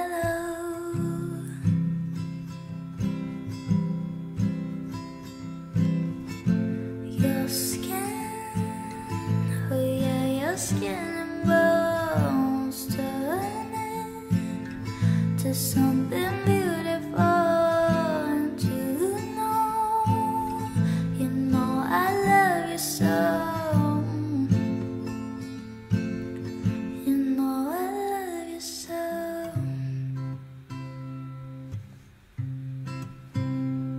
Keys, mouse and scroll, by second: 2.1 ctrl+a, 3.5-5.5 typing, 8.0 5, 8.1 Tab, 8.1 5, 8.3 Return, 11.0-12.0 typing, 13.3-14.3 typing, 20.6 p.